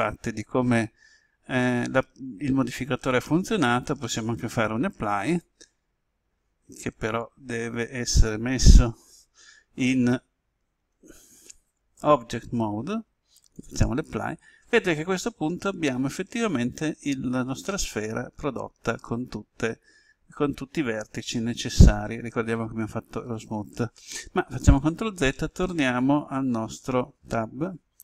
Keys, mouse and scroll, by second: 5.2 click, 10.7 Tab, 13.5 click, 15.5 Tab, 17.6-22.3 middle drag, 24.7 ctrl+z, 27.1 Tab.